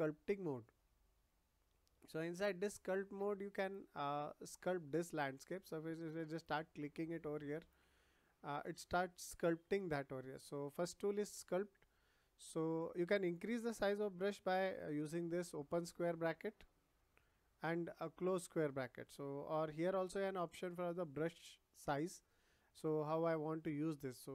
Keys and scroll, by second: 10.4 ctrl+z, 15.1 ], 16.8 [.